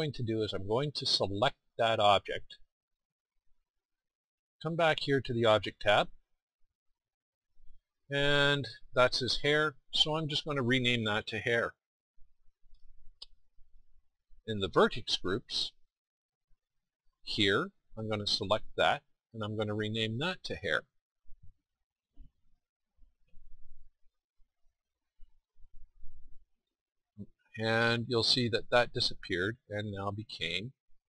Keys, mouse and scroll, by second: 4.1-6.4 middle drag, 8.3-9.7 middle drag, 13.1-18.5 middle drag.